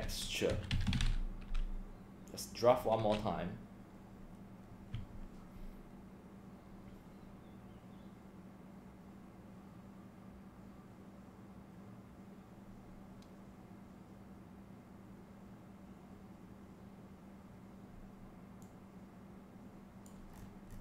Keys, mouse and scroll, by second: 0.0-1.5 typing, 2.3 click, 18.7-20.1 drag, 20.3-20.8 scroll down 6.